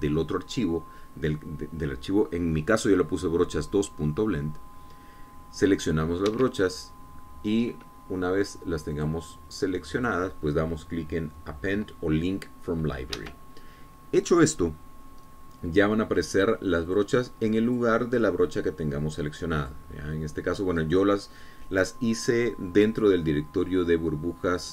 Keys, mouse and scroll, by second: 7.7 Escape, 10.4 click, 11.4 click, 14.6 Escape, 18.3 click, 19.2 click, 21.1 click.